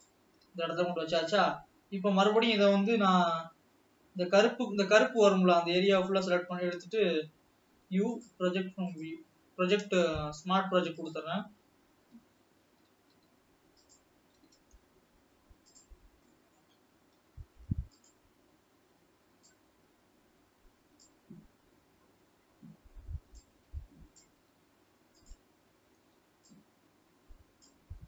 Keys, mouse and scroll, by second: 2.4 alt+a, 3.1 l, 3.6 l, 4.1 l, 6.4 click, 7.1-7.7 scroll down 1, 9.4 u, 10.3 s, 14.7 g, 17.3 s, 21.2 click, 25.0 s, 27.8 click.